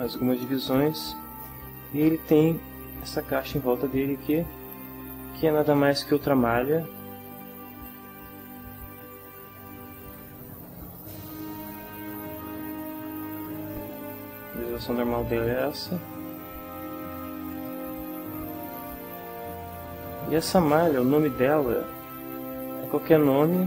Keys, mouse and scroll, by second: 3.4 right click, 5.6 Tab, 7.9 click, 10.1-11.2 drag, 11.6 click, 13.3 click, 15.5 click, 17.5 click, 18.9-20.6 middle drag, 21.6 click, 22.3 click.